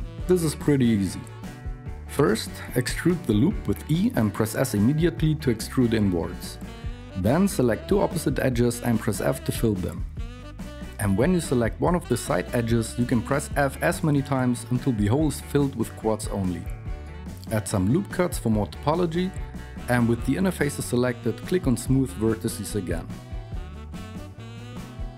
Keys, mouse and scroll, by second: 2.4 e, 6.8 alt+KP_2, 10.0 f, 12.0-14.1 typing, 15.3-16.7 typing, 17.4 ctrl+r, 19.1 alt+KP_3.